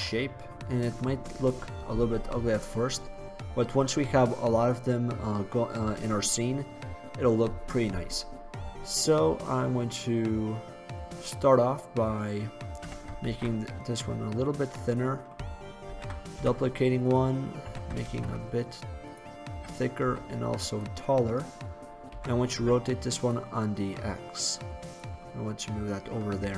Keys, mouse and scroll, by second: 4.7-10.1 middle drag, 12.1 middle click, 13.0 s, 14.8-16.0 drag, 16.0 shift+d, 16.4 click, 16.5 drag, 17.7 s, 19.6 s, 22.2 r, 24.7-26.3 drag, 26.3 middle click.